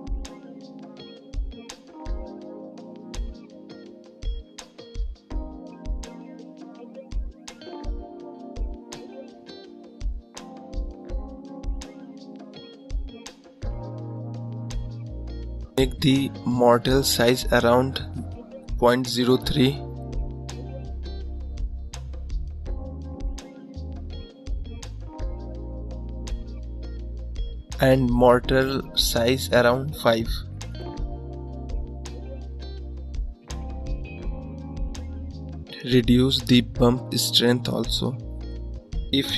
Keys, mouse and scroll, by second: 3.8-10.3 drag, 10.3 scroll up 2, 16.4-20.6 drag, 20.6 ctrl+z, 20.9 ctrl+z, 24.9 click, 30.3-32.0 drag, 32.0-32.5 scroll up 5, 33.0-33.4 scroll up 2, 33.4-33.8 scroll down 3, 34.5 scroll down 1, 36.7-39.3 drag.